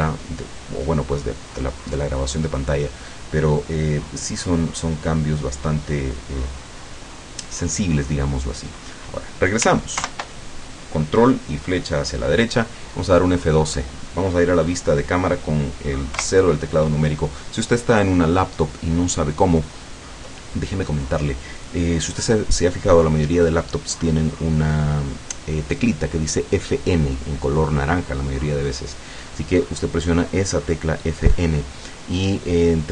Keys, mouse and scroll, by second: 10.0 ctrl+Right, 16.2 KP_0, 19.0 scroll down 2.